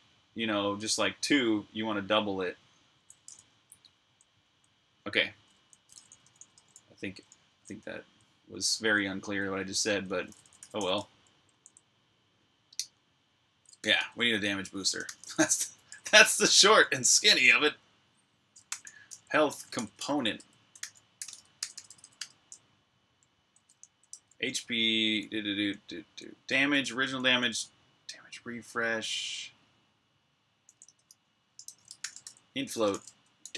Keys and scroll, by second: 3.8-4.2 typing, 5.4-7.9 typing, 10.2 typing, 13.4-16.8 typing, 18.2-22.0 typing, 23.7-27.0 typing, 28.1-29.3 typing, 30.4-33.5 typing.